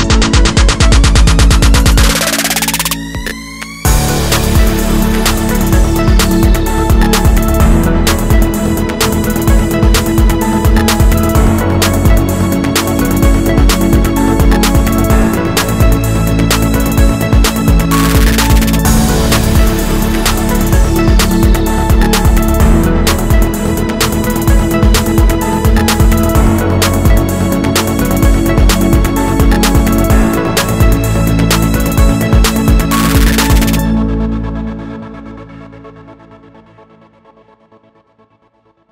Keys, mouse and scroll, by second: 1.2 click, 1.4-2.7 shift+middle drag, 1.6-2.1 scroll up 2, 2.1 3, 2.7 click, 2.9-7.6 middle drag, 4.4 i, 6.0 Escape, 7.0 scroll down 2, 7.2 ctrl+z, 7.6 click, 7.8 k, 9.8 click, 9.9-14.4 middle drag, 10.2 scroll down 1, 10.6 scroll up 1, 14.4 click, 14.7 s, 17.4 click, 17.5-19.9 middle drag, 18.3 KP_1, 18.8 s, 19.9 ctrl+z, 21.0 click, 21.8 click, 22.0 click, 22.3 shift+click, 22.8 g, 24.4-27.0 drag, 25.0 g, 27.3 click, 27.6 click, 27.7 shift+click, 28.0 g, 29.8 ctrl+shift+click, 29.9-31.2 middle drag, 30.3 z, 31.2 click, 36.2 click, 37.1 click, 38.4 middle click.